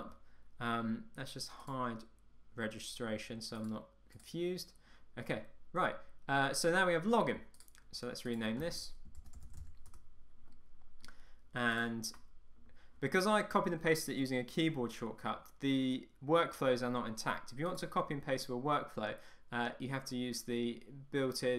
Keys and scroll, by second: 10.0 Return.